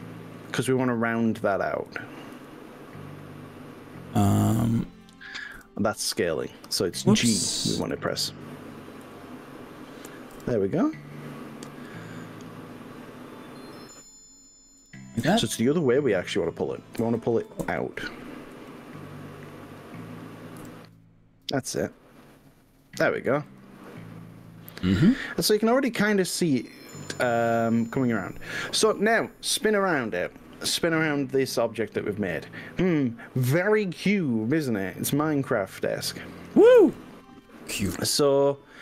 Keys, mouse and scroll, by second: 0.4-0.8 drag, 2.0 g, 2.4 r, 5.6 y, 7.0 click, 8.0 ctrl+z, 9.2 g, 10.4 y, 14.8 click, 15.2 click, 17.0 ctrl+z, 17.6 ctrl+z, 18.6 g, 20.6 y, 23.9 click, 30.4-38.8 middle drag.